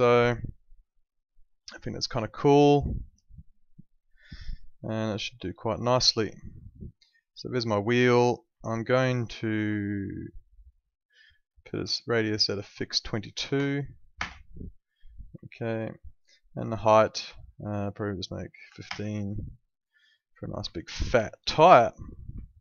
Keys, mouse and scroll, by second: 7.1 click, 7.5 alt+middle click, 8.6 alt+middle click, 10.0 alt+middle click, 13.3 2, 14.1 Return, 15.5 alt+middle click, 17.0 click, 17.9 1, 18.7 5, 18.8 Return, 20.0 alt+middle click, 20.7 alt+middle click, 21.6 alt+middle click, 22.4 alt+middle click.